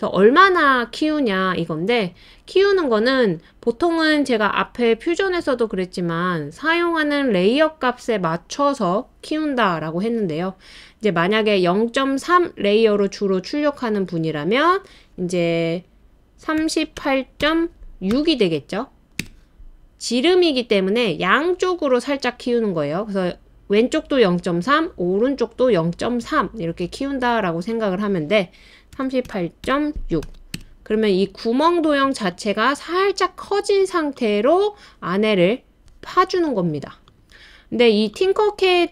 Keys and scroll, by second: 16.3-18.1 typing, 19.2 typing, 28.7-30.5 typing.